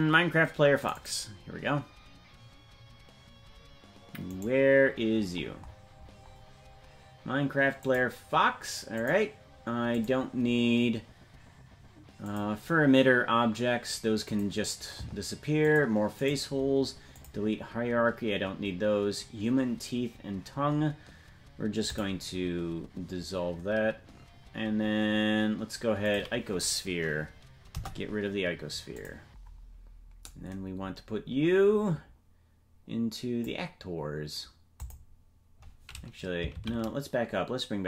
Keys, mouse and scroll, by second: 5.1 scroll down 1, 7.8-20.7 drag, 7.8 scroll down 18, 28.9 Delete, 28.9-37.8 drag, 30.8-32.7 scroll up 4, 34.8-35.2 scroll up 2.